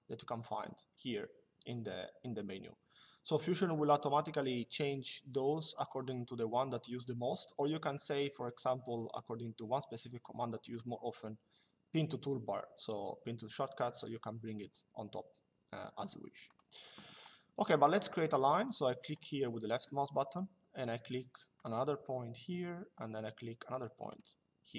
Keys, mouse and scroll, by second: 10.4 click, 16.2 click, 18.9 click, 21.3 click, 23.8 click.